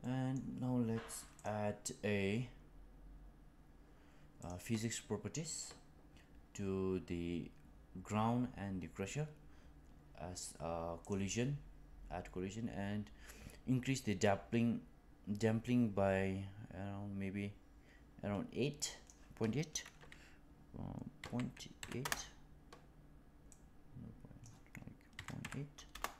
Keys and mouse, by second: 0.0-0.3 middle drag, 4.3 click, 13.2-19.1 drag, 21.1 KP_Decimal, 21.7 KP_8, 21.9 Return.